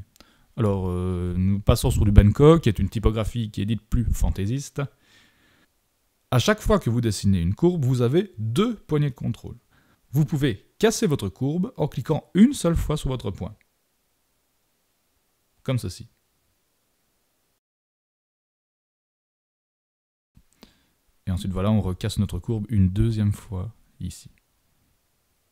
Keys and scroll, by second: 3.8 super+=, 4.0 super+=.